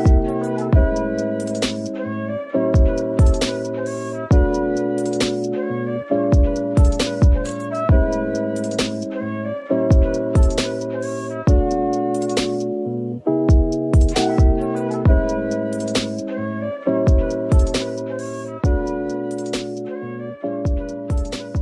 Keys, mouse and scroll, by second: 13.8 scroll down 1, 18.6 middle click, 19.2 g, 19.2 middle click, 19.3 g.